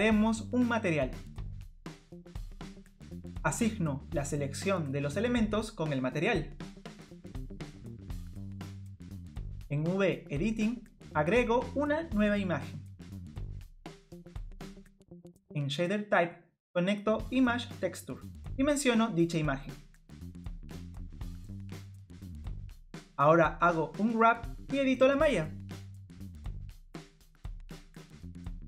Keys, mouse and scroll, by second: 1.0 click, 2.0 click, 2.4 click, 2.5 click, 5.0 click, 28.6 click.